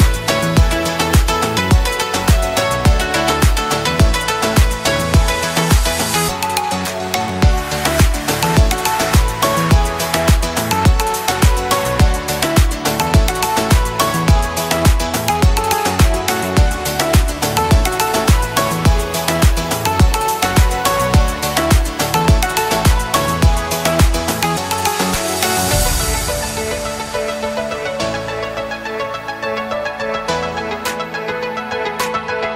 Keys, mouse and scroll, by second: 1.6 right click, 3.9 click, 7.7-9.3 typing, 9.8-10.5 drag, 14.1 click, 15.0 right click, 17.2-19.4 drag, 27.8 alt+scroll up 1, 28.2 space, 28.4 click, 28.7-29.0 space, 29.2 alt+scroll up 1, 29.6 space, 29.7-30.3 click, 32.2 alt+scroll up 1.